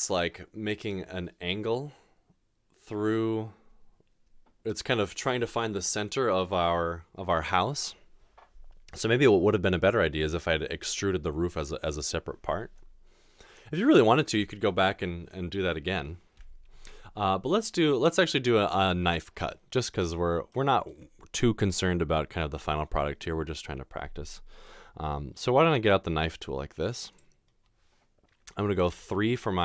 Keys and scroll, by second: 28.9 3.